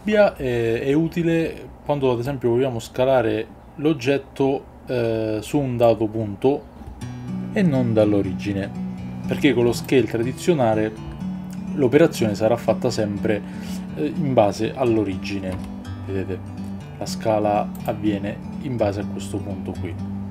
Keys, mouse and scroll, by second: 2.3-5.8 drag, 17.8 click.